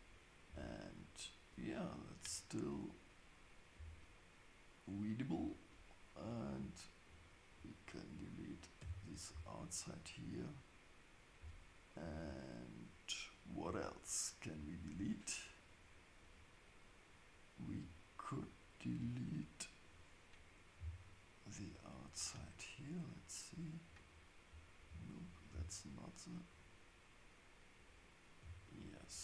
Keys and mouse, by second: 0.5 Tab, 3.7 Tab, 7.1-9.4 drag, 8.8 x, 25.1 click.